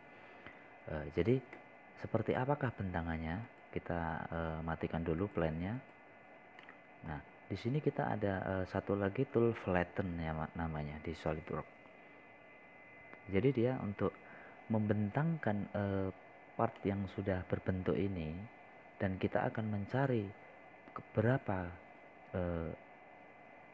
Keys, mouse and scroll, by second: 5.2-6.3 scroll down 1, 6.5-7.6 drag, 9.7 middle click, 18.6 scroll down 1, 19.3-19.8 scroll up 1, 19.8-23.7 middle drag.